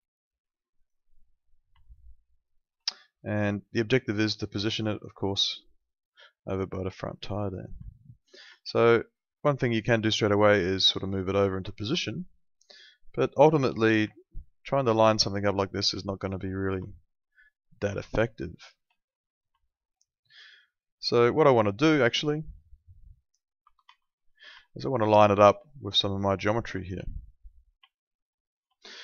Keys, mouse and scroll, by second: 0.8 click, 1.8 alt+middle click, 3.5 alt+middle click, 8.2 middle click, 8.6 alt+middle click, 10.4 click, 12.0 alt+middle click, 13.5 click, 14.1 alt+middle click, 16.9 alt+middle click, 17.9 alt+middle click, 19.5 alt+middle click, 23.2 F3, 23.6 F4, 23.8 F3, 26.8 alt+middle click, 27.0 q, 27.9 alt+middle click.